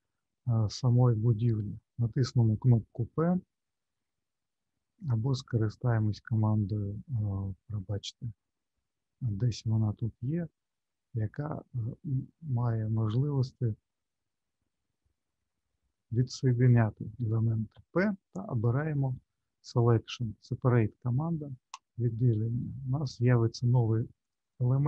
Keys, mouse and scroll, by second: 7.3-7.9 scroll down 4, 8.5-9.7 scroll down 6, 10.2 scroll down 1, 12.9 scroll down 2, 15.0-15.7 scroll up 3, 15.7 middle click, 17.7 p, 24.2 click, 24.5 click.